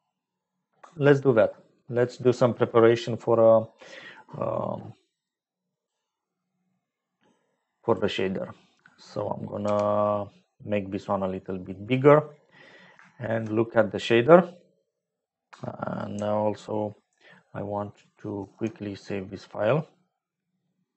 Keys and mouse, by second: 7.9-9.6 drag, 9.6 n, 11.0 click, 13.1 shift+click, 13.3 shift+middle click, 15.8 click, 18.3 ctrl+s.